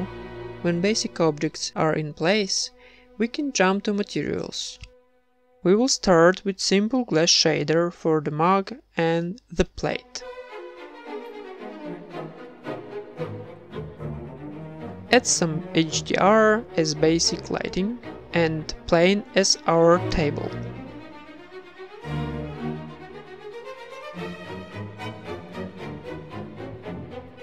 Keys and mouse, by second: 0.0-1.7 typing, 0.4 middle click, 0.5 Tab, 1.1 ctrl+s, 1.5 ctrl+s, 1.9 click, 2.1 right click, 2.6-4.8 middle drag, 2.8 click, 5.1-6.2 right drag, 5.9 ctrl+l, 7.6 ctrl+s, 8.9 z, 9.2 z, 9.7 ctrl+s, 10.6 z, 11.0 shift+a, 12.0 alt+g, 12.4 s, 14.8 z, 15.6 ctrl+s, 16.2 z, 17.8-19.8 drag, 20.7 click, 21.3 z, 21.6 click, 22.6 click, 23.5 middle click, 23.9-27.4 drag.